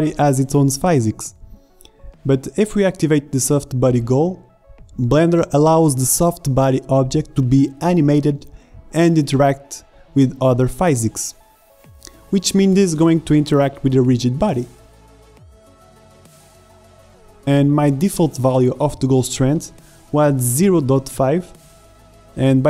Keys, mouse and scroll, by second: 1.5 shift+Left, 11.0-12.7 drag, 12.0 alt+a, 18.3 alt+a, 18.5 shift+Left, 21.9 alt+a.